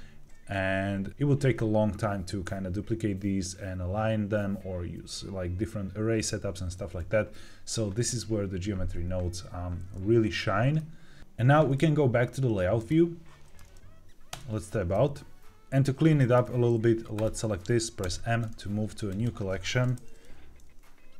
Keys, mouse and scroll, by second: 10.7 middle click, 11.2 ctrl+z, 15.8 scroll up 1, 16.1 shift+middle click, 17.0 click, 17.9 m.